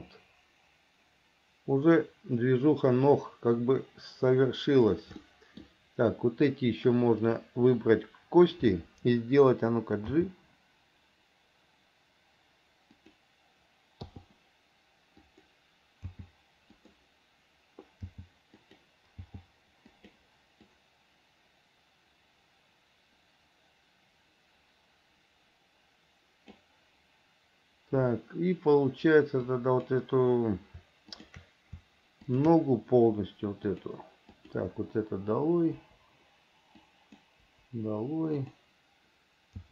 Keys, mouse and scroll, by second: 5.4 middle click, 7.4 click, 10.3 g, 15.4 click, 16.2 g, 18.3 g, 20.9-26.8 drag, 29.7 click, 31.4 shift+click, 33.8 click, 34.5 click, 36.0 Delete, 37.0 click, 37.7 Delete, 38.6 click.